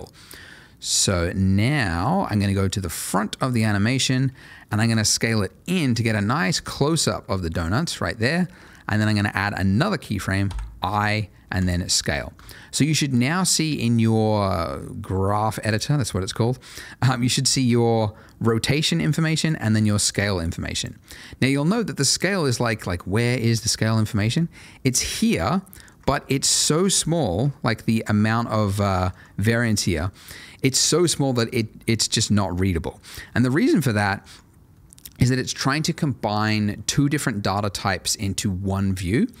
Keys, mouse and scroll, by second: 4.7 s, 7.7 click, 10.4 i, 11.6 click, 19.7 double click, 24.4-24.8 scroll up 1, 24.8 middle click, 25.4 ctrl+middle click, 26.0 ctrl+middle click, 26.5 ctrl+middle click, 26.9 middle click, 27.5 ctrl+middle click, 28.2 ctrl+middle click, 31.4 scroll down 1, 32.0 ctrl+middle click, 33.9 ctrl+middle click, 34.7 middle click.